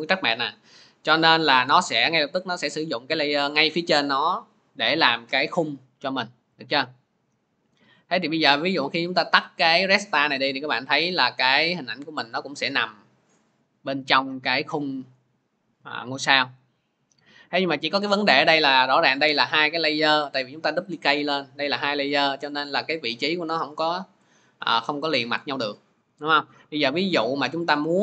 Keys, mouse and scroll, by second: 3.9 click, 6.5 click, 19.0 click, 20.2 click, 20.8 click, 21.6 click, 23.6 click, 26.4 click.